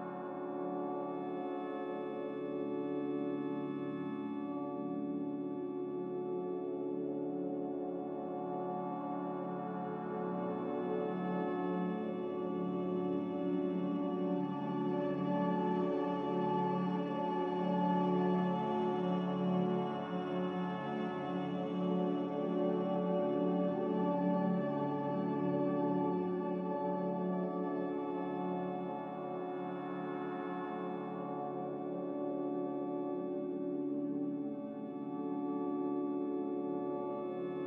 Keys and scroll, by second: 2.7 ctrl+k, 20.0 a, 22.2 z, 23.4 Delete, 26.4 a, 27.5 z, 35.2 a.